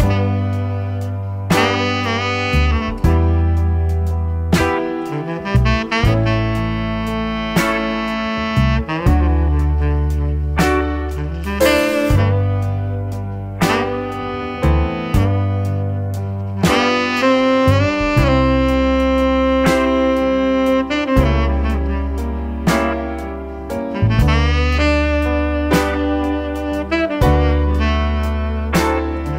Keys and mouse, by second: 2.5 click, 4.2 KP_Decimal, 8.3 click, 8.7 KP_0, 12.2 click, 12.6 KP_Decimal, 14.1 click, 14.4 KP_0, 16.6 click, 20.1 click, 22.4 click, 23.4 click, 27.0 click.